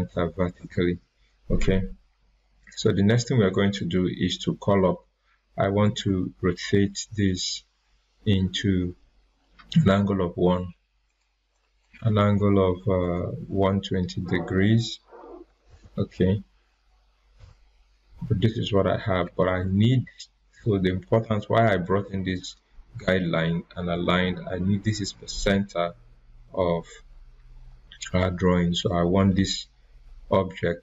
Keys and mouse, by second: 2.6 click, 5.8 click, 11.0 click, 15.2-16.5 typing, 17.3 Return, 19.4 ctrl+z.